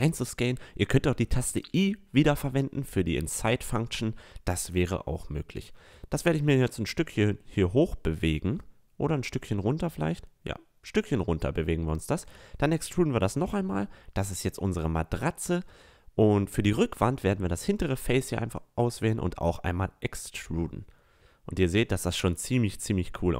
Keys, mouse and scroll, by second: 3.6-4.8 middle drag, 4.8-6.8 drag, 6.8-8.9 middle drag, 10.7 e, 14.8 middle click, 16.4 e, 17.6 click, 18.3 a, 18.6 middle click, 22.4 a.